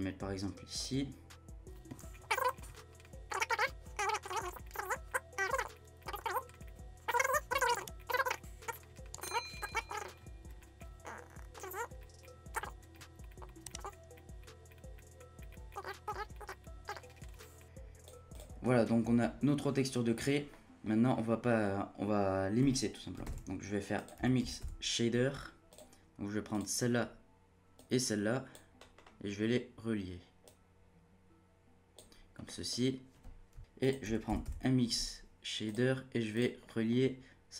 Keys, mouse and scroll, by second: 2.4 scroll down 1, 2.6 click, 2.7 middle click, 2.8 scroll up 6, 2.9 scroll down 1, 3.3 click, 4.0 click, 5.1-6.2 drag, 6.5 middle click, 7.1-8.7 drag, 8.7 middle click, 8.9-9.3 scroll down 5, 9.0 middle click, 9.3 middle click, 9.6 middle click, 9.7 scroll up 1, 10.4 scroll up 1, 13.0 scroll up 9, 13.2-13.9 drag, 14.4 click, 15.2-16.5 drag, 16.6-17.0 drag, 17.0 scroll down 5, 17.3 middle click, 17.3-18.4 drag, 18.5-19.6 scroll down 1, 19.6-20.5 scroll up 4, 20.5 middle click, 20.8-21.2 scroll up 1, 21.2 middle click, 21.6-23.2 scroll up 1, 23.2 shift+a, 29.0-30.4 scroll up 2, 30.4-32.4 drag, 32.4-33.6 middle drag, 33.6 shift+a, 36.6-37.5 middle drag.